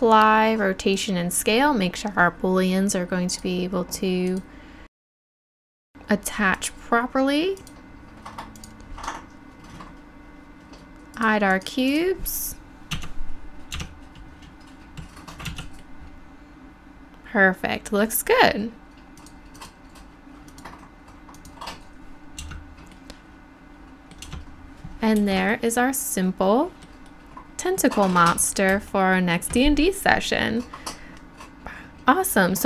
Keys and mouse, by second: 3.3-7.0 drag, 7.6-14.4 drag, 13.0 Tab, 14.4 Tab, 15.5 z, 15.8-17.1 drag, 17.8-19.2 middle drag, 19.2 click, 22.7 Tab, 23.0 click, 24.4 Tab.